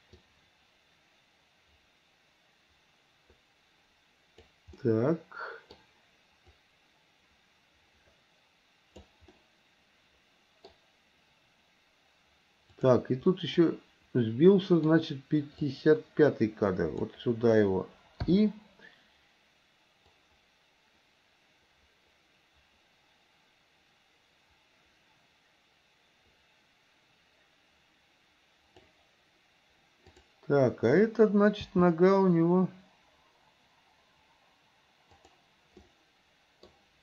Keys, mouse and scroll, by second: 0.3-4.6 drag, 4.8-5.8 middle drag, 6.6-9.2 drag, 9.4-10.8 middle drag, 12.7 click, 13.3-14.9 middle drag, 15.8-17.1 drag, 18.3 i, 20.3-29.0 drag, 30.1 click, 31.7 g, 35.9 middle click.